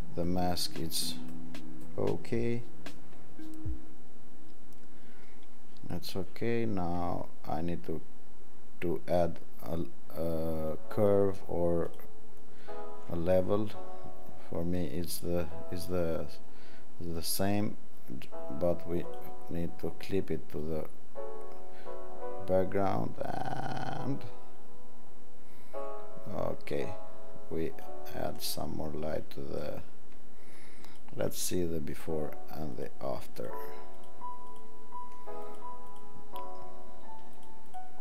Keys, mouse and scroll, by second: 31.0 alt+click, 32.0 alt+click, 32.8 alt+click, 33.5 alt+click, 34.1 alt+click, 34.6 alt+click, 35.6 alt+click, 36.0 alt+click, 37.5 alt+click, 37.8 alt+click.